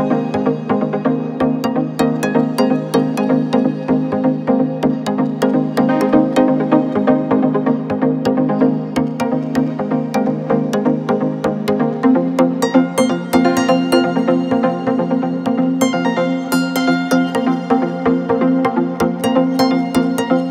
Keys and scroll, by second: 0.2 3, 3.4 Delete, 11.5 /, 11.8 ., 13.3 4, 13.6 3, 16.1 ], 17.3 4, 19.0 4, 19.4 3, 20.3 ].